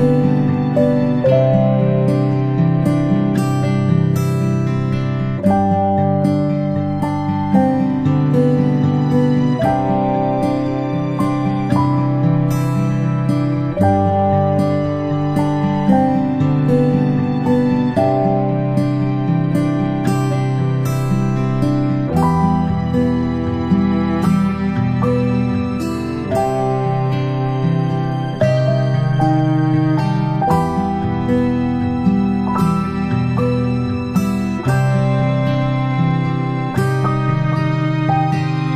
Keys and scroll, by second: 19.5 ctrl+z, 36.3 ctrl+shift+z.